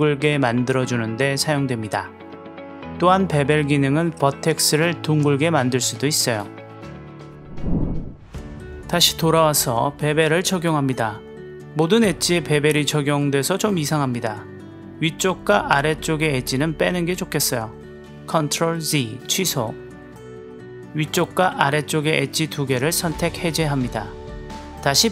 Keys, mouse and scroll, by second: 2.6-4.3 drag, 4.7 click, 5.7 click, 6.3 Tab, 6.3 click, 6.6-7.7 middle drag, 7.5 click, 8.2 click, 9.0 click, 9.2-11.3 drag, 11.9-16.1 drag, 19.3 ctrl+z, 20.2 click, 20.4 click, 21.3 shift+click, 21.6 click, 21.8 middle click, 21.9 click, 22.0 middle click, 22.4 shift+click, 22.7-24.5 drag, 25.0 click.